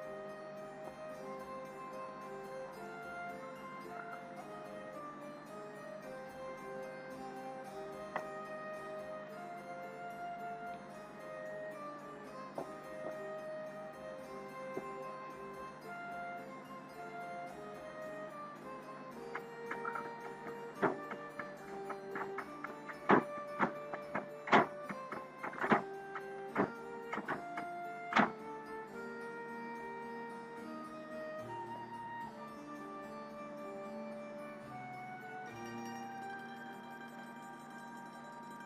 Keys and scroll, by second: 13.7 ], 16.3 ].